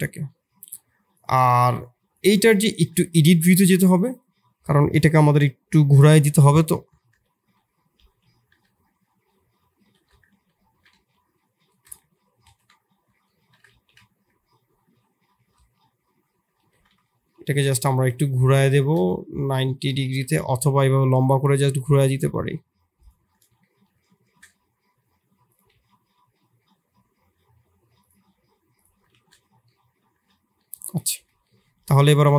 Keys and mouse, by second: 1.1-1.9 drag, 2.3 Tab, 3.1 shift+click, 3.9 click, 4.1 click, 7.1 r, 10.6 x, 11.9 KP_3, 12.4 ctrl+KP_1, 13.3 shift+click, 13.6 r, 17.1 r, 20.6 r, 23.9 shift+z, 25.0 r, 25.7 g, 28.2 r, 29.1 shift+z, 29.7 click, 30.1 Tab, 30.5 click, 31.1 KP_7, 31.8 shift+z, 31.9 shift+click.